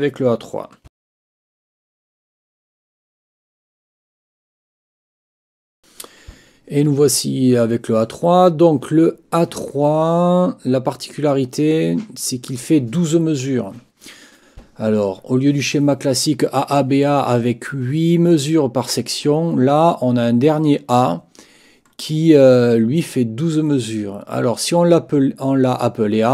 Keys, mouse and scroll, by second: 5.8 ctrl+r.